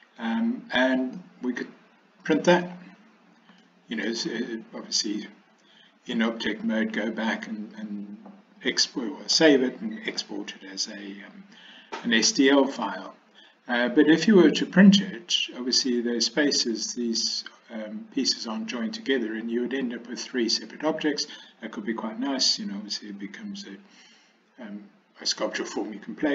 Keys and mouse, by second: 1.2-2.7 middle drag, 3.7 shift+middle click.